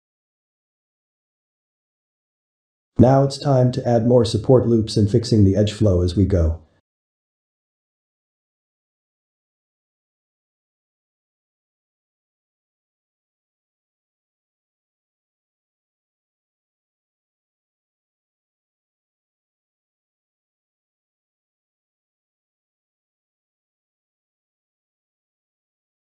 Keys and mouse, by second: 1.4-2.6 shift+middle drag, 2.6 ctrl+r, 5.2-5.5 middle drag, 5.5 Tab, 5.9-10.4 middle drag, 10.4 click, 11.1 click, 12.8 click, 13.6-17.5 shift+middle drag, 20.5-21.6 drag, 21.6 middle click, 22.1 Tab, 22.5-24.9 shift+middle drag, 24.9 ctrl+r.